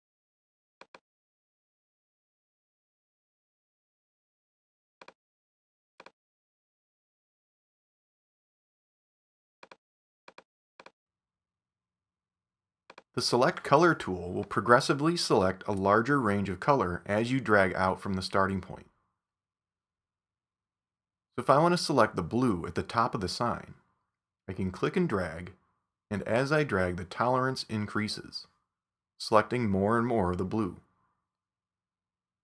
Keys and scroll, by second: 3.4 super+d, 17.6 super+=, 18.6 super+space.